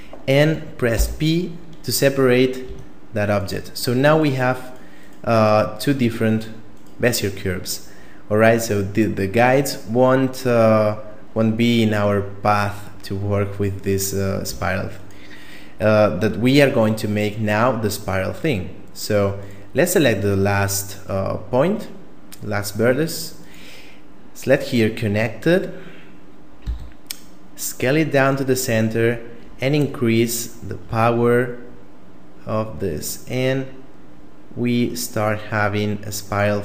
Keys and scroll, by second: 0.9 p, 2.7 Tab, 14.5 Tab, 26.7 s.